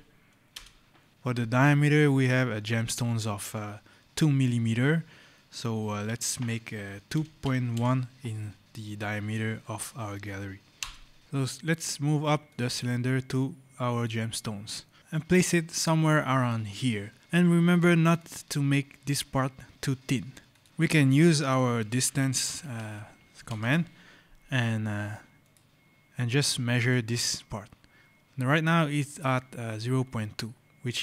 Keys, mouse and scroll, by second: 0.4 Return, 7.0 KP_2, 7.3 KP_Decimal, 7.6 KP_1, 10.6 Return, 11.2 click, 14.2 scroll, 15.0 click, 17.2-17.5 scroll, 17.5 click, 20.4 click, 21.7-23.9 typing, 25.3 click, 30.7-31.0 scroll.